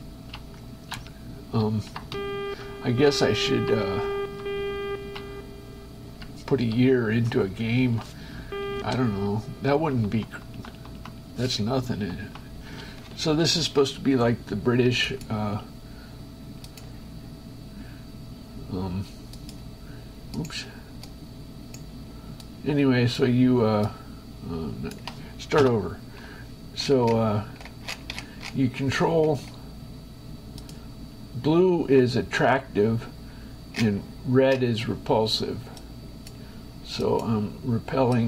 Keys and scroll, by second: 0.2 Right, 0.6 Up, 1.3 Left, 2.3 Down, 3.3 Up, 4.1 Down, 4.8 Right, 5.6 Up, 6.6 Left, 7.1 Down, 8.1 shift+Escape, 9.0 shift+Escape, 10.1 Right, 13.0 space, 26.0 Return.